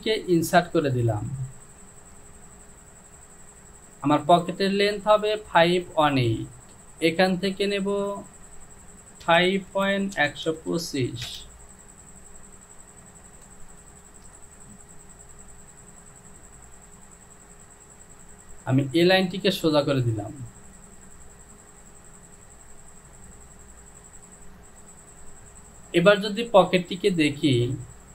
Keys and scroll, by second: 9.4-10.7 typing, 11.3 Return.